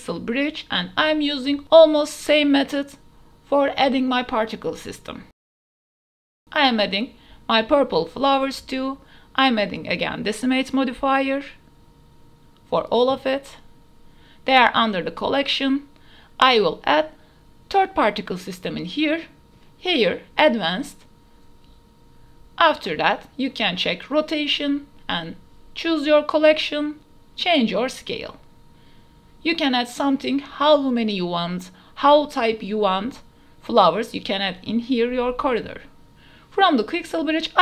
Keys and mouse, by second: 0.0 click, 0.3 middle click, 0.7-1.5 drag, 1.6 click, 2.2 shift+click, 2.4-3.5 typing, 5.2 alt+p, 6.9 click, 7.2 Delete, 7.4 click, 7.6-8.9 typing, 8.2 click, 8.5 click, 8.8 click, 9.3 Delete, 9.8-10.1 drag, 10.3-10.7 drag, 10.8 click, 11.2 ctrl+s, 11.4 drag, 11.8 click, 12.2 click, 12.6 ctrl+a, 13.0 click, 13.4 click, 13.8 ctrl+a, 14.2 drag, 14.7 click, 15.1 ctrl+a, 15.2 click, 15.5 x, 15.7 click, 15.8 click, 16.8-17.2 shift+drag, 17.6 ctrl+s, 17.8 click, 18.3 shift+drag, 18.5 click, 19.0-20.4 drag, 22.4 KP_0, 22.9 ctrl+s, 23.2 click, 24.2 click, 25.2-26.2 drag, 26.6 middle click, 28.4-30.2 right drag, 30.6 right click, 31.5 right click, 35.6 shift+middle click, 35.9 middle click.